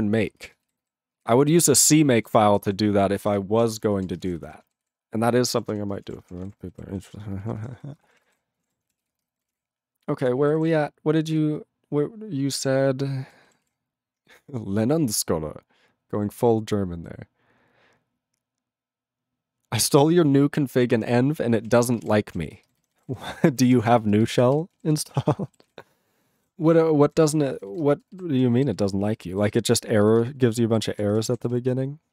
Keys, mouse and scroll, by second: 0.3 ctrl+space, 0.7 ctrl+alt+b, 0.8 ctrl+alt+b, 1.1 ctrl+alt+b, 1.4 ctrl+alt+b, 1.6 ctrl+alt+b, 2.2 ctrl+g, 2.6 ctrl+s, 3.1 ctrl+f, 3.3 ctrl+f, 3.7 space, 4.0 ctrl+a, 4.2 ctrl+g, 4.2 ctrl+n, 4.3 ctrl+n, 4.4 ctrl+e, 4.9 ctrl+s, 5.7 ctrl+s, 5.9 ctrl+space, 6.0 ctrl+a, 6.1 ctrl+p, 6.2 ctrl+p, 6.4 ctrl+e, 6.9 ctrl+s, 7.1 ctrl+a, 7.2 ctrl+space, 7.4 ctrl+e, 7.5 ctrl+n, 7.6 ctrl+n, 7.7 ctrl+g, 7.9 ctrl+space, 8.0 ctrl+a, 8.2 ctrl+p, 8.2 ctrl+g, 8.3 ctrl+e, 8.6 ctrl+p, 8.6 ctrl+a, 9.0 ctrl+s, 9.1 ctrl+space, 9.2 ctrl+n, 9.3 ctrl+n, 9.4 ctrl+n, 9.4 ctrl+g, 9.5 ctrl+e, 9.6-10.3 ctrl+n, 10.5 ctrl+=, 11.2 ctrl+n, 11.4-13.3 ctrl+n, 13.6 ctrl+s, 20.9 ctrl+n, 21.0 ctrl+e, 21.6 ctrl+space, 21.6 ctrl+a, 21.7 ctrl+p, 21.8 ctrl+p, 22.0 ctrl+g, 22.0 ctrl+e, 22.3 ctrl+n, 22.3 ctrl+a, 22.5 ctrl+space, 22.6 ctrl+n, 22.8 ctrl+n, 23.0 ctrl+e, 23.1 ctrl+n, 23.2 ctrl+n, 23.4 ctrl+g, 23.5 ctrl+n, 23.6 ctrl+a, 23.6 ctrl+n, 23.8 ctrl+n, 23.9 ctrl+e, 24.0 ctrl+space, 24.4 ctrl+alt+b, 24.5 ctrl+g, 24.9 ctrl+s, 26.1 ctrl+n, 26.3 ctrl+n, 26.3 ctrl+g, 26.4 ctrl+e, 26.4-27.1 ctrl+n, 27.4 ctrl+n, 27.5 ctrl+n, 27.7 ctrl+n, 27.8 ctrl+space, 28.2 ctrl+alt+b, 28.3 ctrl+g, 28.7 ctrl+s, 28.8 ctrl+space, 29.3 ctrl+alt+b, 29.3 ctrl+alt+b, 29.5 ctrl+g, 29.8 ctrl+n, 30.0 ctrl+b, 30.2 ctrl+space, 30.4 ctrl+e, 30.5 ctrl+b, 31.0 ctrl+alt+f, 31.1 ctrl+g, 31.4 ctrl+s.